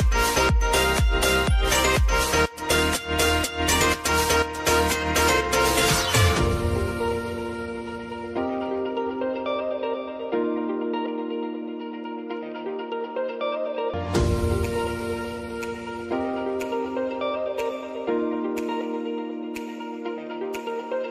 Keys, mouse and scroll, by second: 0.2-4.0 drag, 4.0 space, 6.7 click, 7.4 space, 9.1 k, 10.2-11.7 drag, 12.0 space, 14.0 click, 14.2-14.9 typing, 16.0 click, 16.7 space, 19.0 click.